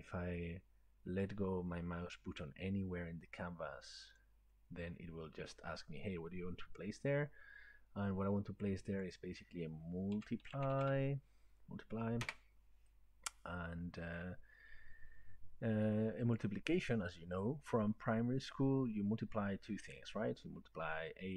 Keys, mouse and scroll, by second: 4.2 click, 9.2 click, 10.2-11.7 typing, 12.2 Return, 16.4 click.